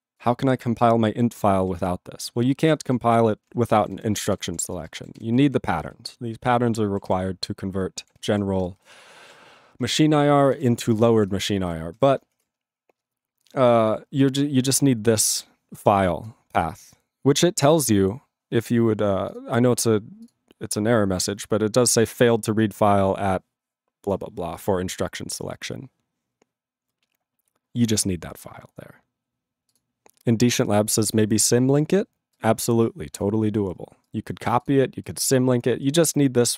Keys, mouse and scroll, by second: 3.2 ctrl+g, 3.7 ctrl+n, 4.3 ctrl+s, 4.5 ctrl+p, 4.5 ctrl+e, 4.6 ctrl+space, 5.1 ctrl+alt+b, 5.1 ctrl+g, 5.3 ctrl+a, 5.4 ctrl+p, 5.7 ctrl+space, 5.8 ctrl+n, 7.2 ctrl+p, 8.2 ctrl+g, 8.3 ctrl+n, 8.8 alt+f, 9.2 alt+b, 10.4 ctrl+n, 10.6 ctrl+a, 10.9 ctrl+f, 11.3 ctrl+space, 11.7 ctrl+alt+f, 11.9 ctrl+g.